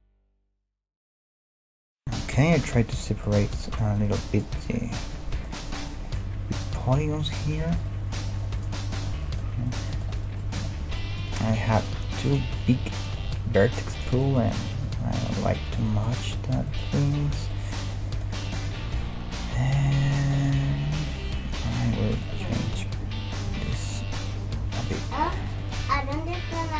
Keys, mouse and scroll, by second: 0.4-2.5 middle drag, 2.1 \, 2.7-4.0 middle drag, 4.0-7.6 drag, 4.2 g, 6.8 g, 7.6-10.1 middle drag, 10.1-11.2 right drag, 10.6 g, 12.0 g, 12.7 g, 14.9 g, 17.5-20.1 middle drag, 18.6-20.5 right drag, 19.0 g, 21.4 g, 22.1 middle click, 22.4-24.3 right drag, 23.5 k.